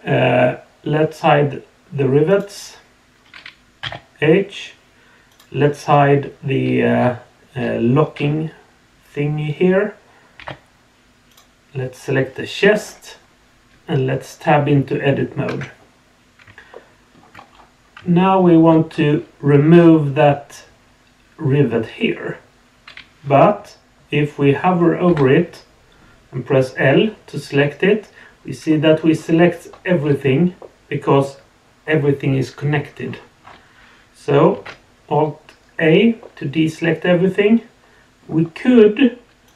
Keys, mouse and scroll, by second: 2.3 click, 3.8 h, 5.3 click, 11.3 click, 15.5 Tab, 16.7-17.1 shift+middle drag, 17.5-17.9 scroll up 2, 18.1-18.6 shift+middle drag, 18.8-21.9 scroll up 1, 25.1 l, 28.7 middle click, 29.1 scroll down 1, 29.9-30.5 scroll up 2, 30.6 middle click, 33.0 scroll up 2, 33.4 scroll down 2, 34.5 alt+a, 36.2-38.2 middle drag, 39.4 click.